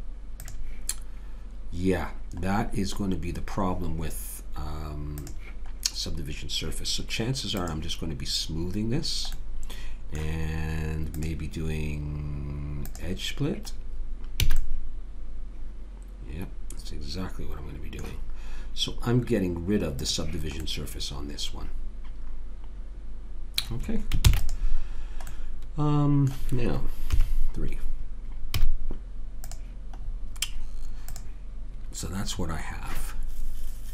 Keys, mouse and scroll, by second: 2.5-5.2 middle drag, 5.2 click, 9.4-11.1 middle drag, 11.1 click, 14.5 a, 14.7-15.8 middle drag, 20.0 click, 20.8-21.8 right drag, 21.8 middle click, 24.3 ctrl+s, 27.1 KP_3, 28.5 z, 30.1 middle click.